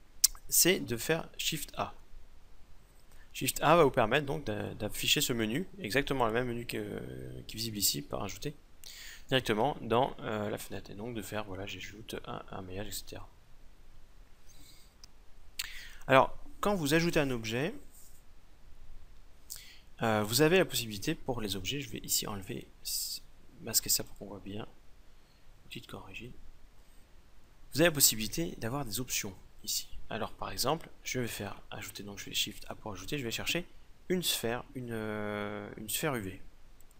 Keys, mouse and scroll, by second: 1.6 shift+a, 6.1-8.5 drag, 9.4 shift+a, 22.5-25.6 drag, 29.1-31.1 drag, 31.0 shift+a.